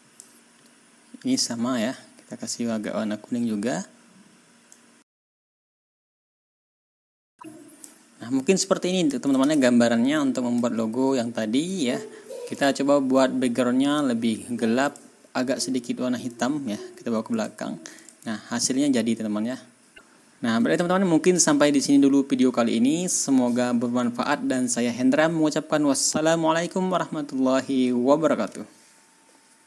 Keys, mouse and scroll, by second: 1.5-2.7 drag, 4.7-5.2 scroll up 1, 5.4-6.5 scroll up 4, 6.6 click, 6.8 click, 7.1 click, 7.2 click, 9.0 click, 9.8-10.3 ctrl+scroll down 3, 10.3 ctrl+scroll up 1, 11.0 ctrl+scroll down 1, 11.4 ctrl+scroll up 1, 12.6 click, 13.2 click, 14.9 click, 16.3 click, 17.4 click, 18.0 click, 18.3 ctrl+scroll down 2, 18.7 ctrl+scroll up 2, 19.1-19.5 ctrl+scroll down 4, 19.7 ctrl+scroll up 2, 19.9 ctrl+scroll down 2, 20.4 ctrl+scroll up 2, 26.2 ctrl+scroll up 2.